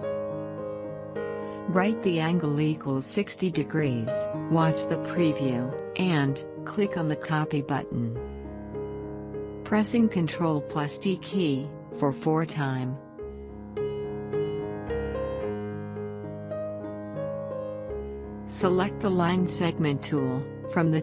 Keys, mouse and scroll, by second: 6.4 click, 13.2 ctrl+d, 19.8 click.